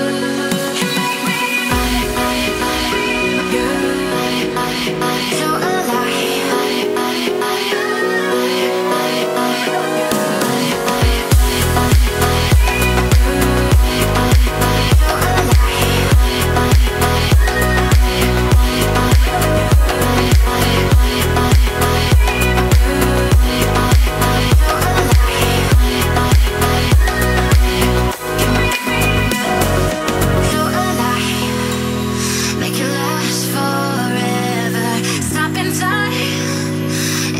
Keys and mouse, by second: 0.7-1.8 drag, 1.8 middle click, 3.7 click, 4.5 middle click, 5.1-6.6 middle drag, 7.2-8.5 drag, 8.8-9.8 middle drag, 10.7 click, 12.0-13.6 middle drag, 14.0-14.8 middle drag, 15.1 ctrl+s, 16.4 click, 17.5 click, 20.3 middle click, 21.8 click, 22.3 middle click, 22.7 shift+middle drag, 23.0-24.7 middle drag, 25.8-27.5 drag, 29.2-30.9 drag, 33.8 click, 36.9 middle click.